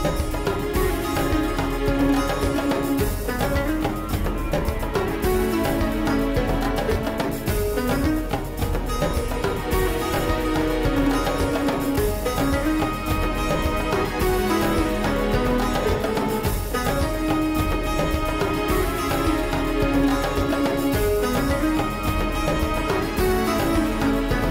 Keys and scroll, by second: 12.4 Tab, 15.6 g, 16.6 g, 17.7 3, 19.7 shift+d, 21.0 Escape.